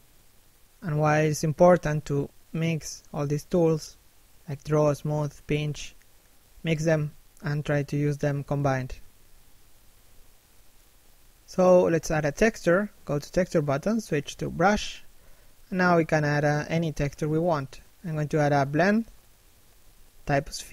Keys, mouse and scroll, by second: 0.0 f, 0.9 right click, 1.1 click, 2.4 middle click, 4.3 1.